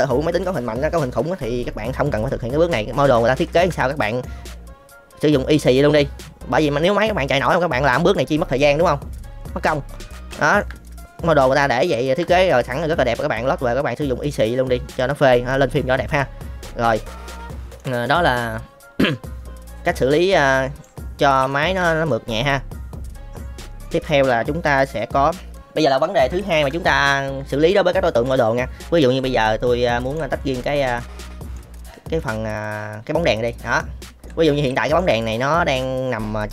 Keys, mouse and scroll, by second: 3.4 shift+middle click, 4.0 middle drag, 6.2-7.4 middle drag, 7.8 click, 8.6 Delete, 9.7 middle drag, 10.3 shift+middle click, 10.8-11.2 middle drag, 11.9 shift+middle drag, 12.5-15.0 middle drag, 15.2 middle drag, 16.0-16.6 middle drag, 16.9-17.7 middle drag, 19.3-20.8 middle drag, 21.5 shift+middle drag, 22.0-23.8 middle drag, 25.5 middle click, 26.4 shift+middle drag, 26.9-27.7 middle drag, 29.4-30.1 middle drag, 30.6 click, 31.2-31.5 middle drag, 31.7-32.1 middle drag, 32.5 click, 33.8-34.2 middle drag, 34.7 shift+middle drag, 35.2-35.8 middle drag.